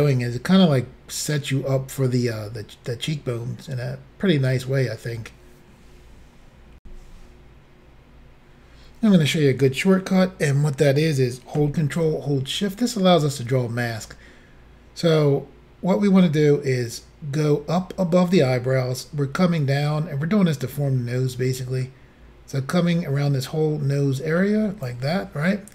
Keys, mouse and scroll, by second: 6.8 Insert, 16.9 ctrl+click.